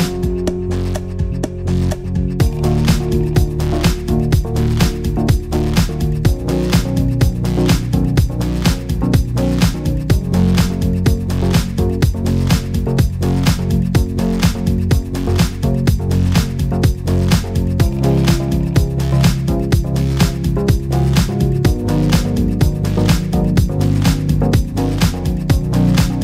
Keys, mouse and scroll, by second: 0.0 click, 0.1 shift+click, 0.2 shift+click, 0.3 ctrl+shift+c, 0.4 scroll down 1, 0.5 shift+middle click, 0.7 scroll up 2, 0.8 middle click, 1.0 click, 1.2 shift+click, 1.3 ctrl+shift+c, 1.6 click, 1.7 shift+click, 1.8 ctrl+shift+c, 2.0 shift+middle click, 2.3 click, 2.4 shift+click, 2.5 ctrl+shift+c, 2.7 middle click, 2.8 click, 3.1 shift+click, 3.2 ctrl+shift+c, 3.4 scroll down 3, 3.5 shift+middle click, 3.9 click, 4.2 shift+click, 4.3 ctrl+shift+c, 4.6 click, 4.8 shift+click, 4.9 ctrl+shift+c, 4.9 shift+click, 5.2 click, 5.3 middle click, 5.4 g, 5.6 click, 5.7 g, 6.0 scroll down 2, 6.2 shift+middle click, 6.3 click, 6.4 g, 6.6 click, 6.9 click, 7.0 click, 7.0 g, 7.8-8.4 scroll up 3, 8.0 shift+middle click, 8.1 middle click, 8.2 shift+middle click, 8.4 shift+middle click, 8.6 click, 8.7 g, 9.1 shift+middle click, 9.3 click, 9.3 g, 9.8 shift+middle click, 9.8 middle click, 11.2 middle click, 11.3 scroll up 1, 11.4 shift+middle click, 11.7 middle click, 11.7 shift+middle click, 11.9 click, 12.2 click, 12.8 click, 12.9 shift+middle click, 13.1 middle click, 13.2 shift+middle click, 13.3 click, 13.7 click, 14.4 r, 15.1 click, 15.2 shift+click, 15.5 click, 15.7 shift+middle click, 15.8 click, 16.0 shift+middle click, 16.2 click, 16.6 Tab, 17.0 click, 17.1 click, 17.5 Tab, 17.8 shift+middle click, 18.1 middle click, 18.2 shift+middle click, 18.3 click, 18.5 click, 18.9 Tab, 19.0 Tab, 19.4 click, 20.4 Tab, 20.4 click, 20.7 middle click, 20.9 shift+middle click, 21.0 click, 21.3 click, 21.6 Tab, 21.9 middle click, 22.1 click, 22.3 click, 22.6 Tab, 23.0 click, 23.2 click, 23.4 click, 23.8 Tab, 24.2 click, 24.4 click, 25.1 click, 25.4 Tab, 25.7 middle click, 25.8 shift+middle click, 25.9 scroll down 4, 26.1 middle click.